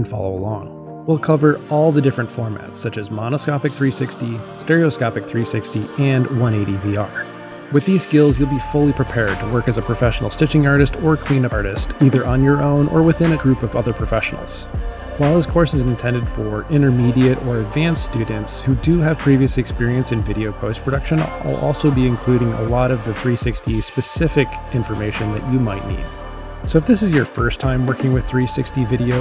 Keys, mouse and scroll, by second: 21.2 click.